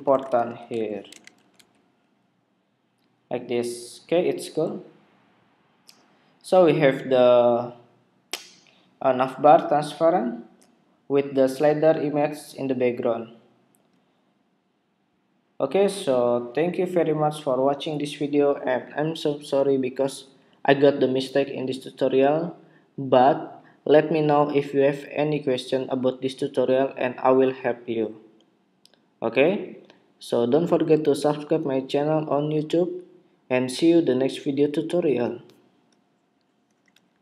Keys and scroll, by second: 1.0 super+s, 1.0 super+Tab, 1.6 super+r, 37.0 shift+super+2.